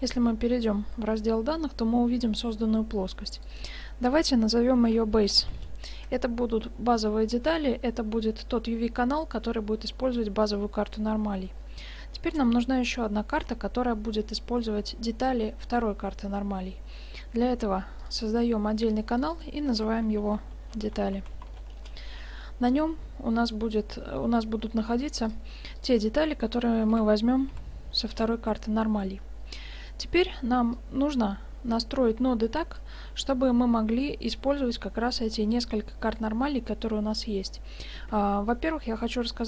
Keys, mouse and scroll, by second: 3.4-5.5 drag, 18.1-21.4 drag, 25.2-26.9 drag, 26.9 BackSpace, 30.8-32.6 drag.